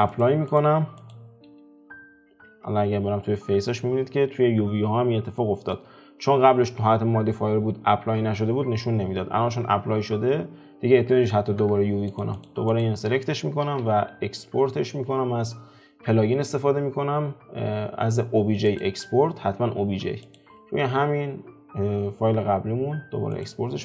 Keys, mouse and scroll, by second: 0.2 click, 1.1 click, 1.5 F4, 2.6 Tab, 3.1 a, 12.2 Tab, 12.4 click, 12.8 click.